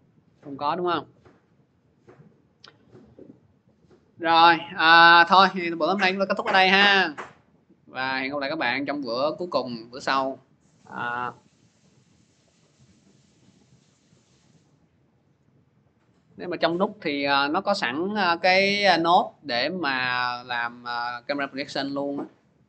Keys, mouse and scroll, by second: 0.0 scroll, 0.7 scroll, 1.4 scroll, 2.0-2.7 scroll, 4.7 click, 5.2 scroll, 6.7 click, 7.9 click, 9.2 click.